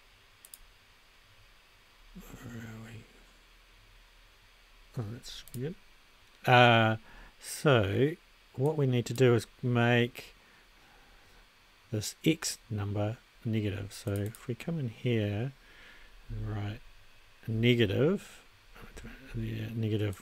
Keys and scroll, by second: 16.0-16.9 typing, 18.9 g.